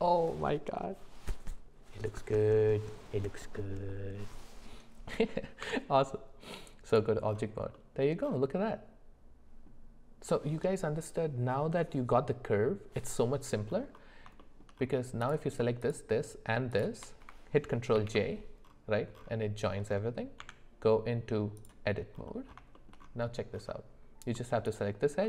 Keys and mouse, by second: 5.6 Tab, 7.7 middle drag, 8.7-9.7 middle drag, 14.4 shift+middle click, 15.8 shift+click, 16.7 shift+click, 17.9 ctrl+j, 20.4 Tab, 22.7 middle click.